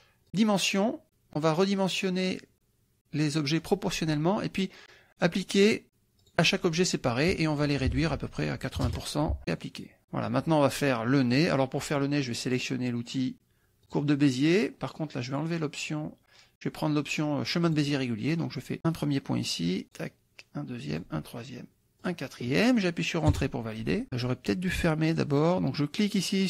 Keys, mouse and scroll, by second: 0.3 click, 3.6 click, 6.2 click, 7.6 click, 8.3 ctrl+a, 8.8 KP_8, 8.9 KP_0, 9.5 click, 10.0 ctrl+middle click, 13.9 click, 17.7 click, 19.9 click, 21.0 click, 22.0 click, 23.3 Return, 26.0 click.